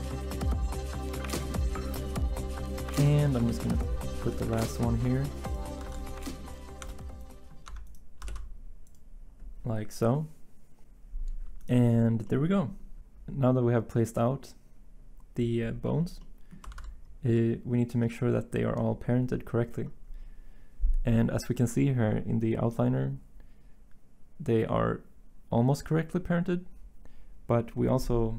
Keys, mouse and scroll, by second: 0.3 s, 0.5 Tab, 0.9 s, 1.4 Tab, 2.4 Tab, 3.5 Tab, 4.3 Tab, 5.9 s, 6.8 Tab, 7.6 Tab, 8.3 s, 16.7 z.